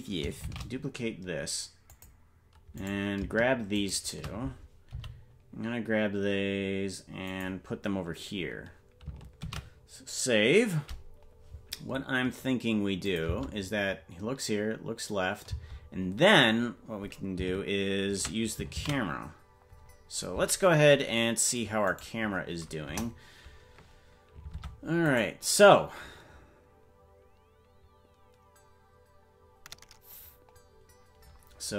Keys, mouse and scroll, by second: 0.4 shift+d, 2.8 right click, 3.8 shift+right click, 4.9 g, 12.1 ctrl+s, 13.1 click, 13.3 space, 16.2 space, 21.5 ctrl+s, 22.0 right click, 22.8 KP_0, 24.6 ctrl+Tab, 25.2 right click.